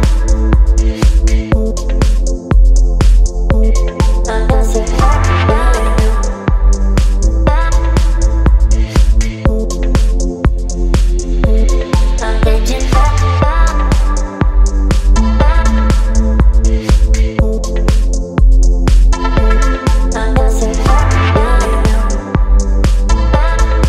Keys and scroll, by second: 16.9 space.